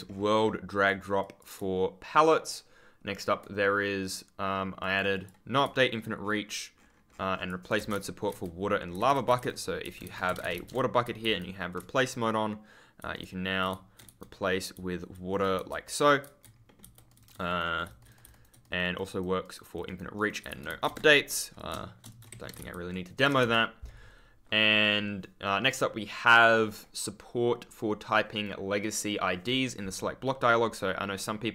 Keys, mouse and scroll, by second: 1.1 click, 4.7 click, 5.8 ctrl+scroll up 1, 6.5 ctrl+click, 6.7-7.5 scroll up 1, 7.8 w, 8.2 e, 9.3 r, 9.9 Escape, 10.2 w, 10.3 space, 11.1 r, 11.7 ctrl+w, 13.1 ctrl+right click, 15.4 a, 15.8-16.1 scroll down 1, 16.1 w, 16.6 middle click, 16.7 r, 17.0 right click, 20.4 space, 20.7 e, 21.2 shift+click, 22.0 shift+click, 22.2 Escape, 22.4 space, 22.5 ctrl+w, 22.6 ctrl+d.